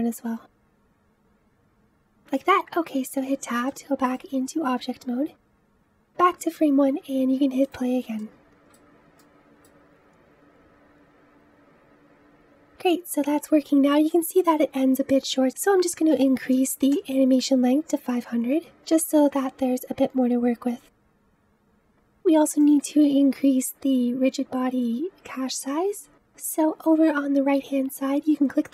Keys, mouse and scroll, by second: 0.0 click, 0.4 g, 3.1 Tab, 3.6-5.4 middle drag, 5.4-6.8 drag, 6.8 space, 7.5 click, 8.1-11.7 middle drag, 16.9 space, 18.3 click, 19.6 KP_0, 20.5-21.8 drag, 22.5-25.4 middle drag, 28.6 click.